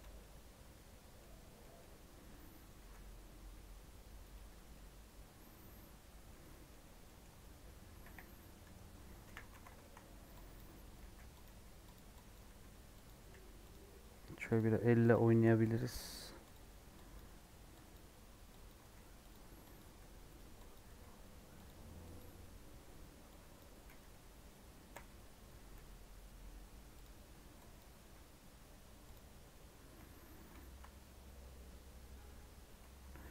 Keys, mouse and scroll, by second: 0.0 Tab, 0.1-1.2 middle drag, 1.2-1.6 scroll down 2, 1.6 middle click, 1.9 Tab, 2.0-2.4 scroll up 2, 2.8 alt+s, 4.5 Tab, 4.6 scroll down 1, 4.7-6.3 middle drag, 6.3 scroll down 1, 6.5 middle click, 6.7 scroll up 3, 7.0-8.0 middle drag, 8.0 KP_1, 8.6 Tab, 8.8 scroll up 5, 9.2 1, 9.5 alt+z, 9.8 shift+middle click, 10.5 click, 10.9-14.6 typing, 12.3 click, 15.2 shift+middle click, 15.7 click, 15.8 g, 17.1 click, 17.9 click, 18.6 click, 18.7 g, 19.7 click, 20.7 click, 20.8 g, 22.1 click, 23.5 click, 23.9 g, 24.9 g, 27.7 click, 27.9 g, 29.5-29.9 scroll down 1, 29.9 scroll up 2, 30.5-32.2 shift+middle drag, 32.2 3, 33.2 ctrl+r.